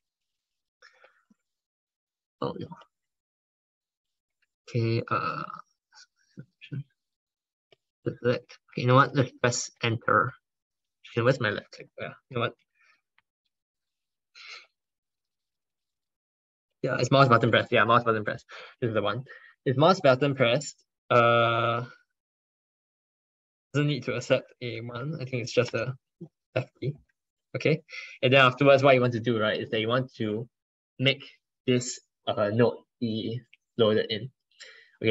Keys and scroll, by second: 11.8 ctrl+BackSpace, 11.9 ctrl+BackSpace.